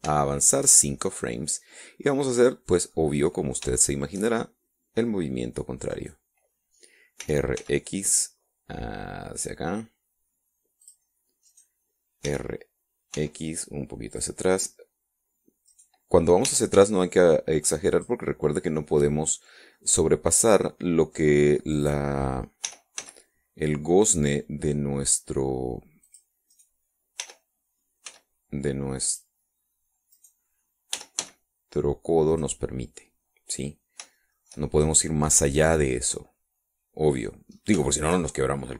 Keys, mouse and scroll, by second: 0.3 click, 1.3 shift+click, 2.2-4.2 drag, 4.4 middle click, 4.9 shift+click, 7.0 right click, 8.3 r, 8.7 x, 11.9 click, 12.6 right click, 13.4 r, 14.2 x, 15.2 click, 16.8 right click, 17.5 r, 17.8 x, 19.0 click, 19.6-20.7 middle drag, 20.9-22.4 middle drag, 22.8 right click, 23.7 r, 24.1 x, 27.1 click, 27.6 right click, 28.3 r, 29.2 x, 30.2 click, 31.3 right click, 32.1 r, 32.3 x, 33.4 click, 34.1-34.5 scroll down 1, 35.3 shift+middle click, 36.0-36.4 shift+scroll up 1, 36.4 scroll down 1, 36.8-38.5 drag.